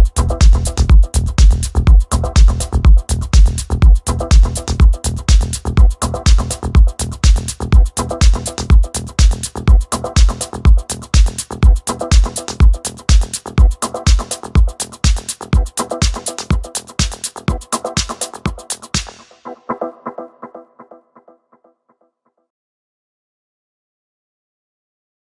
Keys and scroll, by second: 0.0-8.6 typing, 11.2-15.7 typing, 16.7 w, 17.0 space, 17.3 d, 18.5 w, 19.5-23.7 typing.